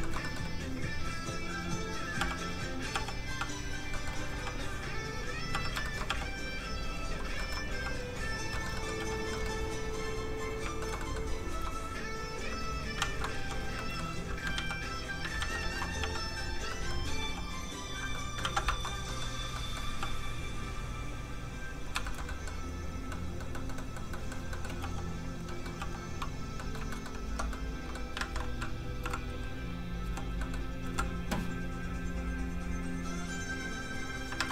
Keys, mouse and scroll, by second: 0.0 shift+middle click, 0.2 middle click, 0.6 click, 2.2 f, 2.3 click, 2.9 f, 3.1 click, 3.9 middle click, 4.3 f, 4.4 click, 4.6 click, 5.5 f, 5.6 click, 5.8 shift+middle click, 6.0 middle click, 6.1 f, 6.2 click, 7.3 shift+middle click, 7.7 middle click, 7.8 click, 8.5 shift+middle click, 8.7 middle click, 8.8 middle click, 9.0 f, 9.1 click, 9.3 shift+middle click, 10.6 shift+click, 11.0 shift+middle click, 11.3 click, 12.1 click, 13.0 ctrl+z, 13.4 f, 13.5 click, 13.7 shift+middle click, 14.4 ctrl+middle click, 14.5 ctrl+z, 15.4 ctrl+shift+z, 15.6 ctrl+shift+z, 16.0 f, 16.1 click, 16.7 middle click, 17.2 f, 17.3 click, 18.1 middle click, 18.3 ctrl+middle click, 18.4 ctrl+z, 18.7 shift+middle click, 20.0 middle click, 20.0 f, 20.1 click, 22.0 shift+middle click, 22.2 middle click, 22.3 middle click, 22.7 click, 23.1 middle click, 24.8 f, 24.9 click, 25.4 middle click, 25.8 f, 25.9 click, 26.5 middle click, 26.9 middle click, 27.2 shift+Tab, 27.5 middle click, 28.1 alt+a, 29.0 a, 30.0 l, 30.4 middle click, 30.8 l, 31.9 click, 32.6-32.9 scroll up 1, 33.3 click, 34.3 alt+a.